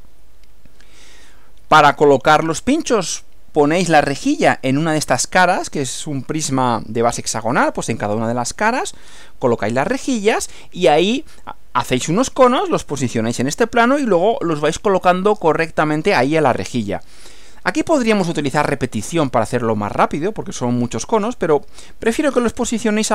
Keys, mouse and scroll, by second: 0.1 Right.